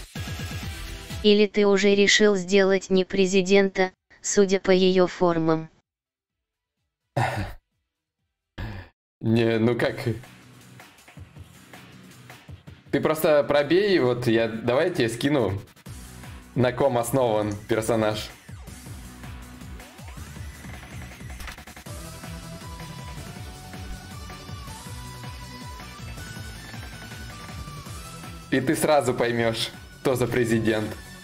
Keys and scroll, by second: 19.6-24.7 typing.